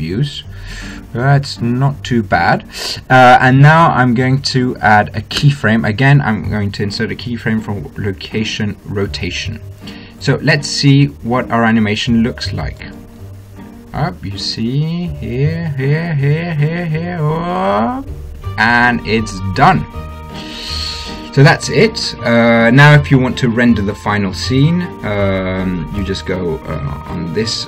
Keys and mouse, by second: 2.0-6.3 middle drag, 6.3 i, 11.2-13.8 drag, 13.8 alt+a, 21.8 alt+a, 27.0-27.6 drag.